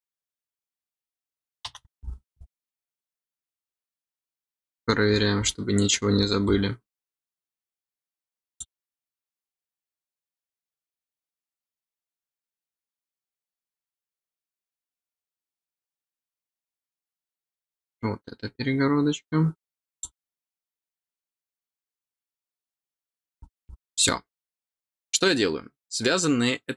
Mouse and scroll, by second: 1.0 middle click, 3.3 middle click, 4.8-5.4 scroll up 4, 5.4 middle click, 6.2 scroll up 2, 8.4 click, 11.2 click, 12.7-14.0 middle drag, 14.3 middle click, 15.5 middle click, 19.9 click, 22.7 middle click.